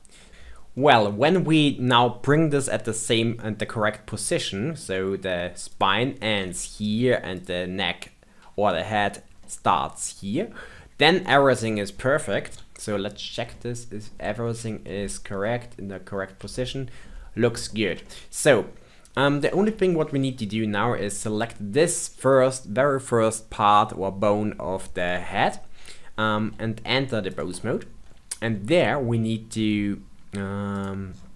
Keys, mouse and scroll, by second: 0.3 click, 0.7-5.6 middle drag, 5.6 click, 7.3 click, 8.1-9.3 scroll down 2, 9.3-12.4 middle drag, 12.4 KP_1, 12.8-13.5 scroll up 5, 13.5-16.0 shift+middle drag, 16.0 scroll down 1, 16.4 shift+middle click, 17.3 scroll up 2, 17.6-21.3 shift+middle drag, 21.3 click, 26.5 ctrl+Tab, 30.7 click, 31.0-31.3 scroll down 10.